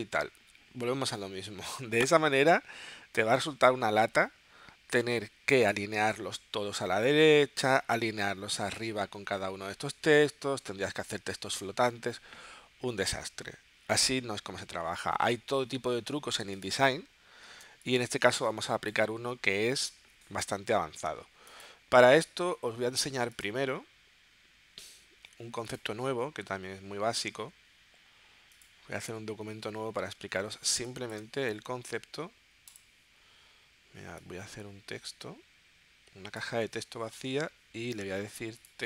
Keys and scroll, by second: 15.2 super+Tab, 17.6 space.